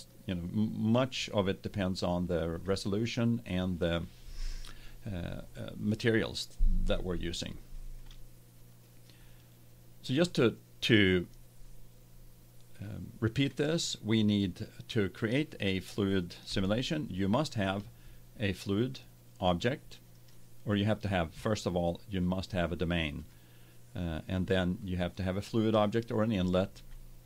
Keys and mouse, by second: 0.0-2.0 drag, 16.6-18.3 middle drag, 20.1-21.7 middle drag, 21.7 click, 23.2-25.1 drag.